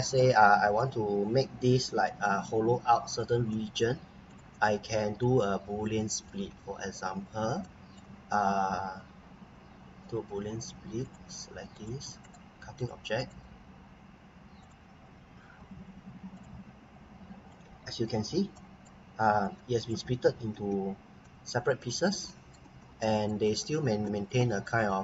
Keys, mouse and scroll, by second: 1.1 scroll up 1, 1.6 Escape, 2.0 right click, 4.3 click, 5.1 right click, 11.0 click, 12.2 right click, 12.8 click, 13.2 right click, 14.6 click, 15.5 Delete, 16.3 click, 18.5 right click, 19.4 click, 20.5 Escape, 20.9 scroll up 1, 21.2 right click, 22.3 right click, 22.8 scroll down 1, 23.0 right click, 23.4 click, 23.7 scroll down 1, 24.1 right click.